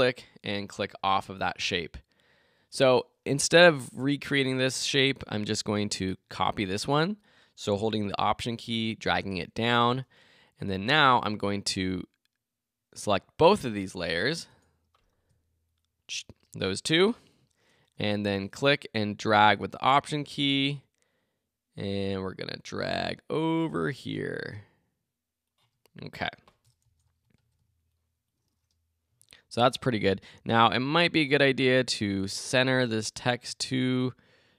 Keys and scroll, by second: 4.0 BackSpace, 14.6 Return, 15.3 shift+Return, 26.8 Return, 27.6 alt+Return.